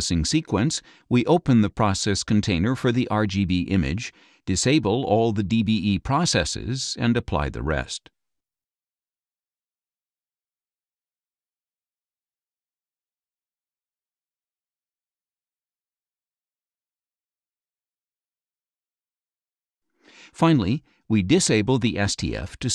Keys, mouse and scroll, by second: 0.0 click, 1.3 click, 4.6 click, 5.5 click, 6.1 click, 6.7 click, 7.4 click, 7.9 click, 8.5 click, 11.5 click, 17.5 click, 19.3 click, 22.4 click.